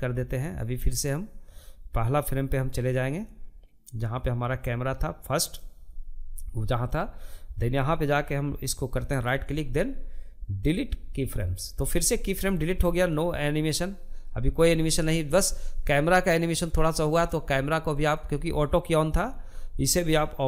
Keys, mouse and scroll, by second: 1.7-4.6 drag, 7.5-10.5 right drag, 11.5-14.5 drag, 16.3-20.4 drag.